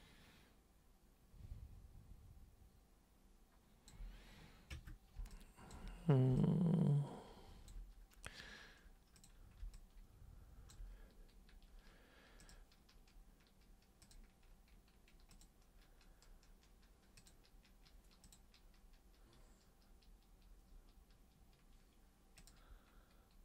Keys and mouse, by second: 4.7 super+Caps_Lock, 5.3 alt+super+click, 6.3-7.7 alt+drag, 9.1 click, 9.7-10.7 alt+drag, 12.4 click, 14.0 super+click, 15.3 super+click, 17.1 super+click, 18.2 super+click, 22.4 super+click.